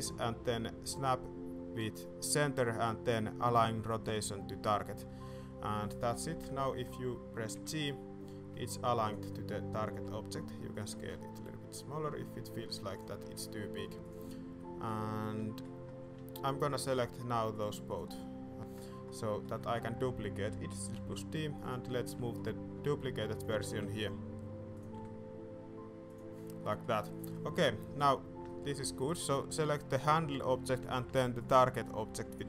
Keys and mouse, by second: 6.0 click, 7.5 g, 9.3 shift+drag, 9.8 s, 11.0 shift+click, 11.3 g, 13.2 g, 14.5-14.9 middle drag, 15.0 middle drag, 15.4 shift+middle click, 17.5 shift+middle click, 17.8 middle click, 18.5 shift+middle drag, 19.2 shift+middle click, 19.5 middle drag, 20.9 shift+d, 22.0 click, 22.3 shift+click, 22.7 g, 23.7 r, 24.9 g, 26.6-26.9 drag, 27.2 middle click, 28.5 shift+middle click, 29.4 middle click.